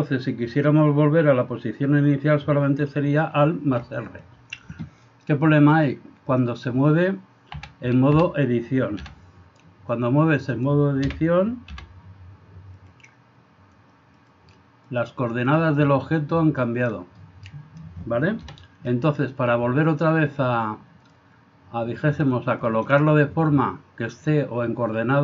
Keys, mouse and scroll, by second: 3.5 alt+r, 4.2 click, 5.8-6.5 drag, 7.6 a, 7.8 a, 8.2 a, 9.0 r, 11.1 o, 11.7 r, 14.3-15.1 drag, 15.6-16.9 middle drag, 17.2-17.8 middle drag, 22.7 shift+middle click.